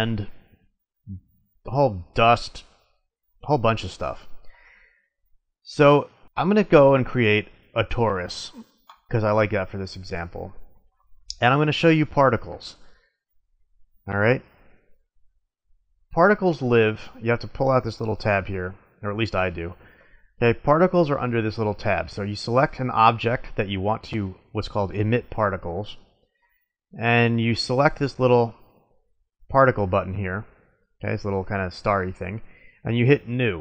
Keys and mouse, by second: 5.4-6.2 drag, 6.9-8.8 drag, 8.9-10.6 drag, 10.6-11.8 middle drag, 16.6-17.9 drag, 18.0 click, 18.4 click, 18.7 middle click, 22.5-24.3 drag, 28.4-33.6 drag.